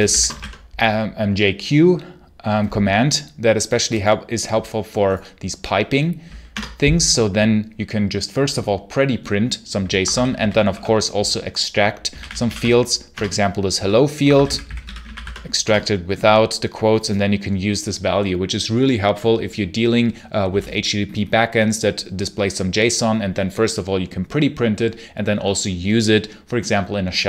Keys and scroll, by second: 0.0-0.7 typing, 6.4 Return, 9.7-15.5 typing, 13.0 Return, 15.5 Return.